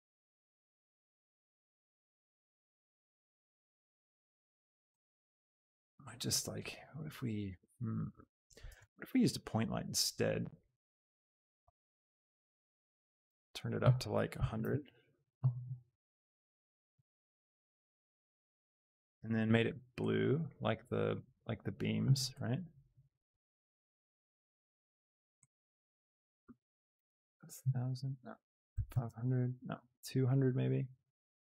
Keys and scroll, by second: 0.2 z, 3.8 z, 11.5 g, 14.5 KP_0, 14.8 Return, 15.9 g, 17.0 z, 26.9 Return, 28.8 KP_5, 29.1 Return.